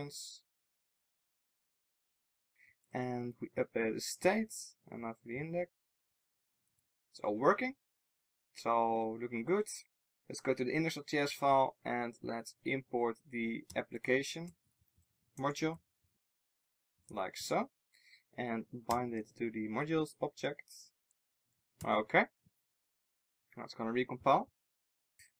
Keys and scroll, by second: 0.5 super+v, 6.8 super+v, 15.9 Return, 16.9 Return, 21.4 alt+super+l, 21.9 alt+super+l, 22.0 super+s.